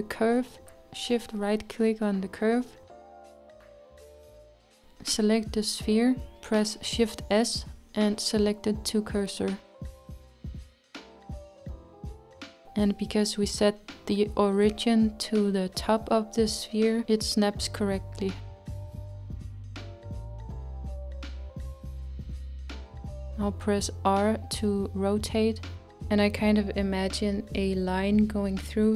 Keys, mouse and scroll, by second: 1.2-3.0 shift+right drag, 3.0-6.0 middle drag, 6.0 click, 8.4 shift+s, 14.0 shift+s, 16.3-20.3 middle drag, 20.3-21.2 scroll up 4, 21.2-24.1 middle drag, 24.1 e.